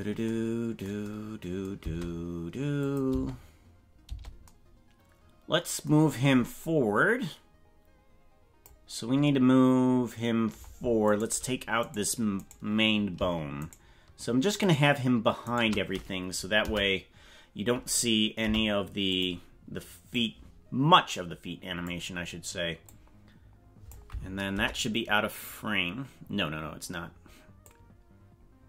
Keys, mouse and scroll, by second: 1.9 space, 2.9 click, 3.1 space, 4.1 space, 6.7-8.8 drag, 11.0 right click, 11.8 right click, 13.6 shift+right click, 14.6 shift+right click, 15.4 shift+right click, 16.6 Delete, 18.4 Delete, 20.2-22.0 drag, 23.0-24.0 drag, 24.5 KP_0, 26.6 scroll up 3, 27.7-28.6 drag.